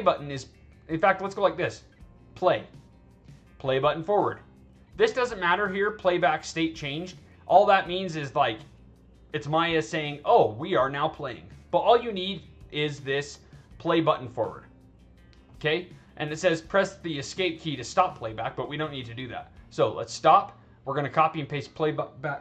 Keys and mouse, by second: 1.1 click, 2.2 click, 19.5 click, 21.1 click.